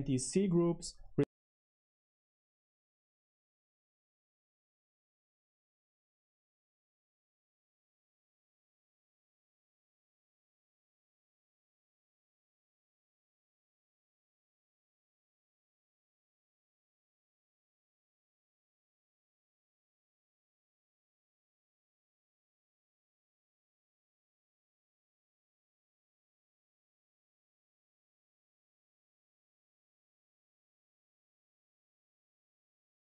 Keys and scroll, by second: 1.0 space, 1.9 super+7, 2.9-33.0 typing, 3.3 Escape, 15.3 Escape, 17.8 super+b.